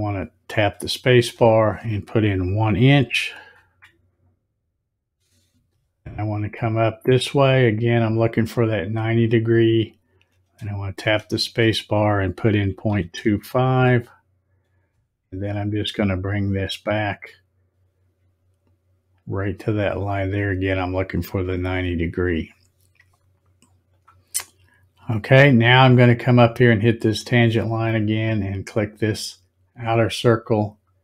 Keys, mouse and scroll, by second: 1.1 space, 10.9 space, 21.1 click, 23.9 click, 27.0 click.